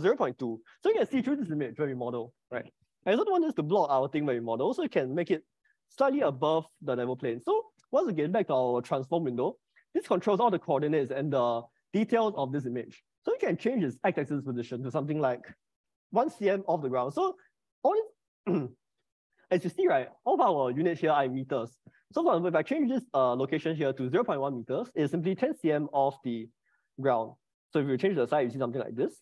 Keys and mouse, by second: 3.7 middle click, 13.6-25.3 drag, 26.9 click, 27.4 middle click, 28.5-29.2 middle drag.